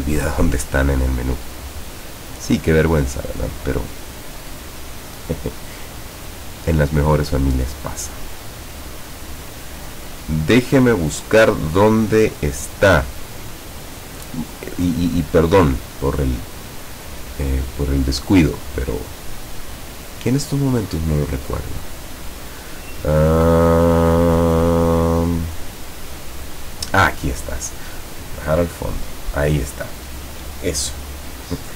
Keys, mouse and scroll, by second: 28.5 click.